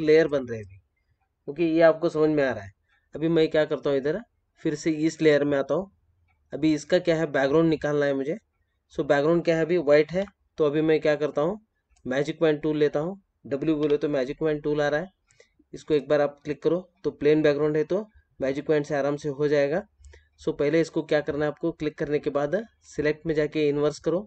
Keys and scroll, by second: 10.0 ctrl+-.